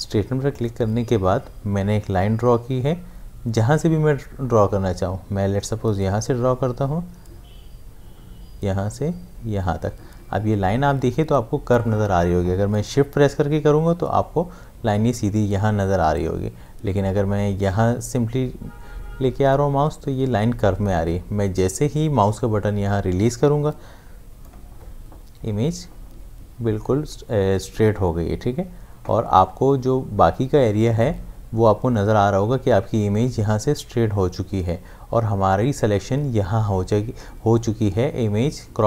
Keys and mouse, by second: 0.5 click, 6.0-16.0 drag.